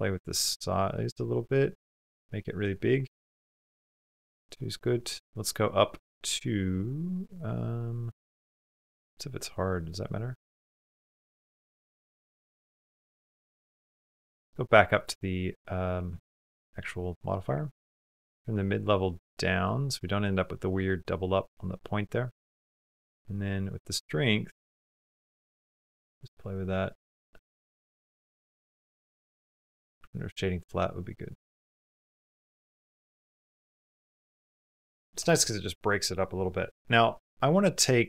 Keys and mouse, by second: 4.4 click, 7.0 click, 7.6-8.6 drag, 9.6 click, 12.4 middle click, 13.0 middle click, 16.7 middle click, 17.7 click, 19.7 middle click, 20.5 shift+middle click, 20.9 middle click, 22.3-25.6 drag, 26.1-27.2 middle drag, 27.4 middle click, 29.1 middle click, 29.9-31.5 ctrl+middle drag, 31.7 ctrl+middle click, 31.7 ctrl+click, 31.7 ctrl+right click, 32.0-33.0 middle drag, 33.4 shift+middle click, 34.2 shift+middle click, 34.4 click, 35.3 click.